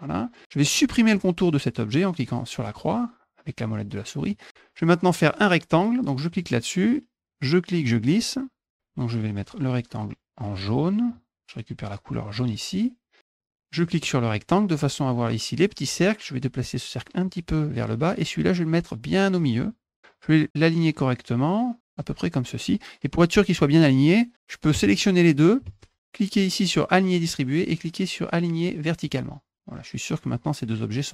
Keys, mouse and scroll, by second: 2.6 middle click, 4.2 click, 6.3 click, 7.4-8.7 drag, 11.1 click, 12.3 click, 13.8 click, 16.3 click, 18.7 click, 20.5-21.9 drag, 24.8 shift+click, 26.9 click, 29.0 click.